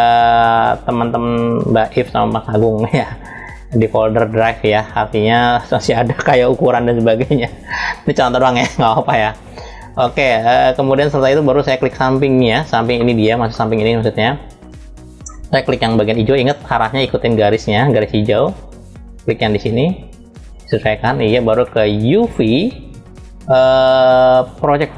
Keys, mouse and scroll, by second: 9.7-10.8 middle drag, 11.1-11.6 scroll down 1, 11.6 click, 12.6 middle click, 20.1 click.